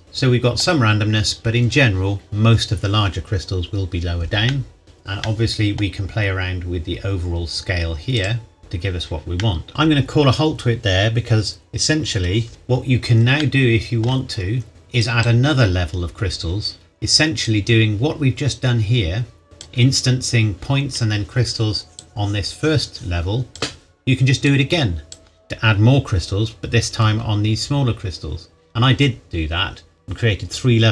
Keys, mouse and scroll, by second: 0.0 middle click, 4.4 middle click, 6.0-6.8 scroll up 1, 6.8-8.2 scroll down 1, 8.2 click, 8.6 middle click, 9.7-10.4 scroll down 1, 12.5-13.4 scroll down 1, 13.4 shift+middle click, 14.3-14.7 scroll up 1, 15.0 click, 17.4-19.8 drag, 22.0-25.4 drag, 26.6-28.6 scroll up 1.